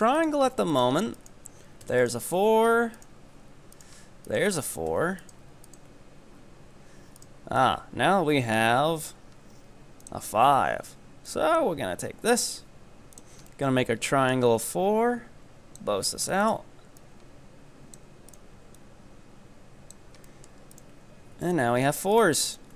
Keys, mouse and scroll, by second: 0.2 right click, 0.7 right click, 1.2 ctrl+right click, 1.9 f, 2.0 right click, 2.4-3.0 scroll up 3, 3.0 right click, 3.8 ctrl+right click, 5.0 f, 5.2 right click, 5.7 ctrl+right click, 7.2 right click, 7.6-8.8 middle drag, 8.8-10.0 scroll up 3, 10.0-13.5 drag, 13.5-14.7 middle drag, 14.7-16.1 drag, 16.1-16.6 right drag, 17.0-18.3 drag, 18.3 right click, 18.8-20.3 drag, 20.3 middle click, 20.8 ctrl+right click, 21.4 f, 21.5 right click, 22.5 ctrl+right click.